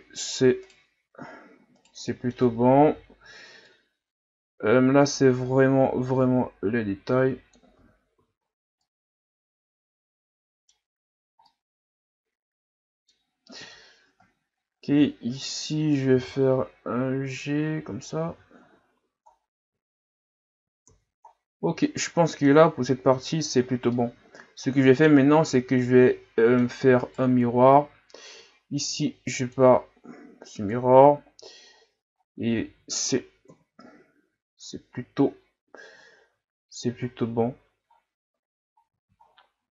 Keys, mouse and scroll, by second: 0.6 alt+right click, 1.8 right click, 2.1 middle click, 2.8 o, 3.6-6.7 drag, 7.8 Tab, 8.1 a, 8.5-8.8 scroll down 1, 8.8-10.8 middle drag, 10.8-11.2 scroll up 5, 11.5-13.6 middle drag, 13.6 KP_3, 14.3 shift+scroll down 1, 14.9 Tab, 16.2 g, 18.3 Tab, 18.6 a, 18.9 a, 19.3-19.9 scroll down 3, 20.8 ctrl+s, 21.3-21.8 scroll down 5, 21.8-22.8 middle drag, 22.8-23.4 scroll up 1, 23.4-23.9 scroll up 7, 23.9-27.0 middle drag, 27.0 right click, 28.8-29.3 drag, 30.7 click, 31.7 scroll down 4, 32.6 a, 33.5 KP_1, 34.7-35.2 scroll down 3, 35.2 scroll up 2, 36.3-37.3 ctrl+scroll down 2, 38.0-38.8 scroll down 1, 38.8-39.7 ctrl+scroll down 7.